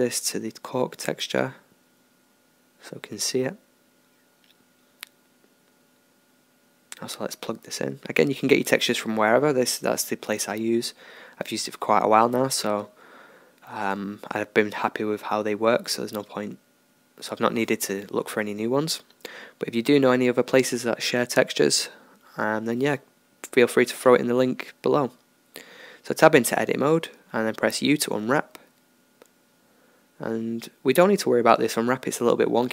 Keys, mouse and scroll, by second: 1.2-7.6 middle drag, 7.6-12.5 drag, 12.5-16.9 middle drag, 17.2 KP_1, 18.7-22.1 middle drag, 20.7 Tab, 22.1 a, 24.3 u, 28.8-31.9 middle drag, 31.4 Tab.